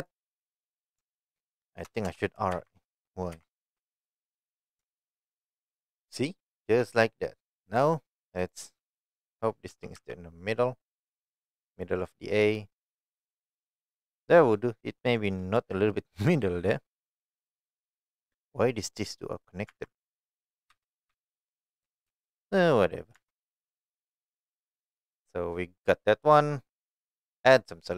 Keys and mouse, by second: 0.0 shift+middle drag, 1.0 Tab, 1.8 BackSpace, 2.0 BackSpace, 2.5 shift+a, 3.3 shift+y, 4.8 Tab, 7.7 click, 9.7 g, 9.9 x, 13.0 click, 19.7 Tab, 20.7 Left, 21.1 Left, 21.5 Left, 21.8 Right, 22.1 Right, 23.1 Tab, 23.8-24.4 middle drag, 24.8-25.3 middle drag, 27.6-27.9 drag.